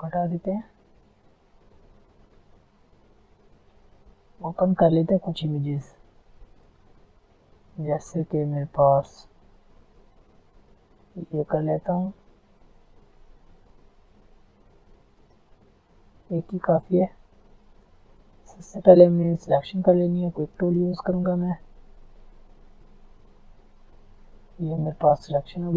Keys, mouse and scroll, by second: 10.9 click, 13.7 click, 14.9 alt+scroll down 1, 15.2 alt+scroll up 1, 16.6 alt+scroll down 1, 17.3 alt+scroll up 1, 18.2 alt+scroll down 1, 18.5 alt+scroll up 1, 19.9 click, 20.3 right click, 20.8 click, 21.4 alt+scroll down 1, 21.8 alt+scroll up 1, 23.1 click, 23.8-24.1 alt+scroll down 2, 24.5 alt+click, 24.7-25.1 alt+scroll down 2.